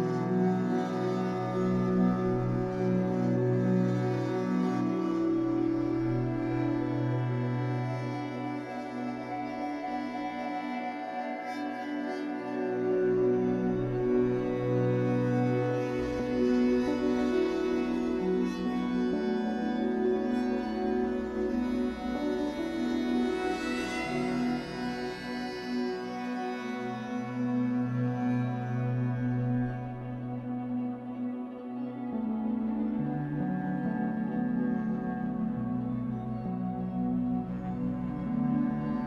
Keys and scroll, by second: 0.5 Escape, 2.4 F8, 6.8 w, 14.4 Escape, 35.3 Escape, 37.9 Escape.